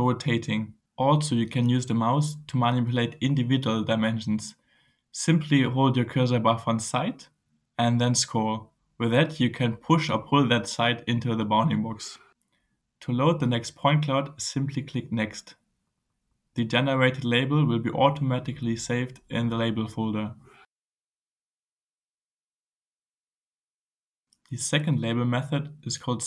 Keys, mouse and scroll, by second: 4.1-5.5 drag, 10.3-11.0 scroll down 2, 11.3-11.8 scroll up 1, 11.9-12.2 scroll up 1, 12.6-13.1 scroll up 2, 13.3-13.7 scroll down 2, 13.9 scroll up 1, 18.2 click, 23.1-24.3 right drag, 24.6 click, 25.7-26.1 scroll up 1.